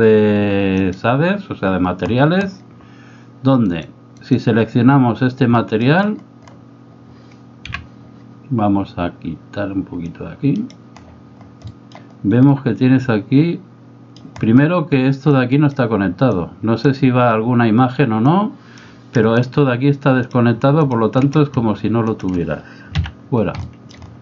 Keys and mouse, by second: 3.7 right click, 5.6 middle click, 7.7 n, 10.3 click, 11.8 middle click, 12.5-14.2 middle drag, 15.4 click, 16.4 click, 18.3 click, 19.4 click, 20.2 click, 20.8 shift+click, 22.1 shift+click, 23.1 x, 23.7 middle click.